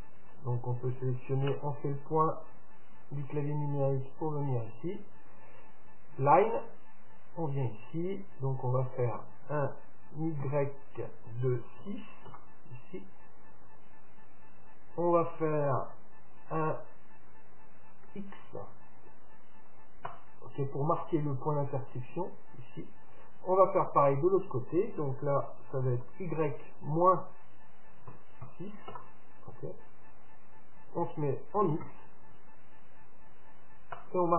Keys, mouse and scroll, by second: 0.4-2.3 right drag, 1.4 KP_Decimal, 3.2-6.4 middle drag, 3.2-3.8 scroll up 1, 3.8-4.5 scroll up 1, 5.6-6.1 scroll down 1, 6.4-8.2 drag.